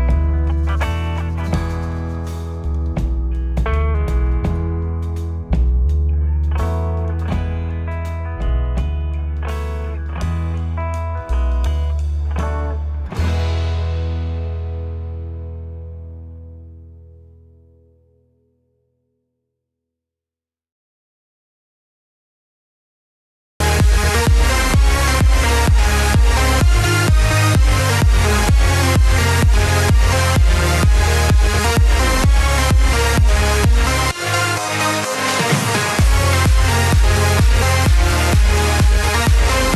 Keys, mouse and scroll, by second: 2.1 click, 4.8-7.6 alt+drag, 9.8-10.6 scroll up 1, 10.6 g, 17.7-20.7 middle drag, 22.5 alt+click, 23.9 ctrl+KP_Add, 25.8 KP_7, 27.0 KP_1, 31.8 g, 37.9-39.7 middle drag.